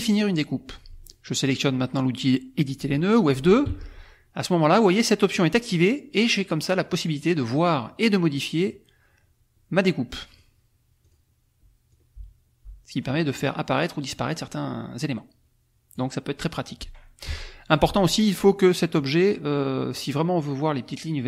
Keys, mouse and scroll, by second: 0.0 click, 3.6 F2, 5.2 click, 5.7 click, 10.3 click, 11.0 click, 11.9-16.1 drag, 17.2 F1, 18.9 click.